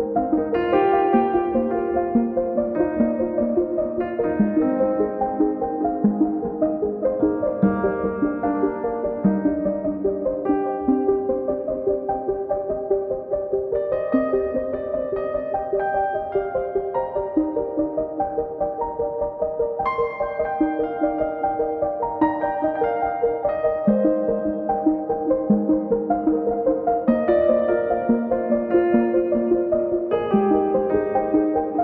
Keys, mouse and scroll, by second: 0.2 middle click, 0.4 click, 1.4 middle click, 1.5 click, 2.4 middle click, 2.6 click, 3.0 middle click, 3.1 click, 3.7 middle click, 4.1 click, 4.9 middle click, 5.1 click, 5.3 middle click, 5.7 click, 6.2 middle click, 6.5 click, 7.4 middle click, 7.7 click, 8.7 middle click, 9.0 click, 9.6 scroll down 2, 9.8 middle click, 10.2 scroll up 2, 10.3 middle click, 10.5 click, 11.2 middle click, 11.7 KP_1, 12.1-13.9 drag, 13.9 scroll up 2, 15.2-16.4 drag, 16.4 scroll up 2, 16.5-18.4 drag, 20.2 click, 21.4 scroll down 3, 21.6 scroll up 2, 21.8-23.8 drag, 24.6-26.9 drag, 28.3 click, 28.7 scroll down 4, 28.7 scroll up 2, 29.0-30.3 drag, 30.9 scroll up 2, 31.0 scroll down 2, 31.1 scroll up 2, 31.3-31.8 drag.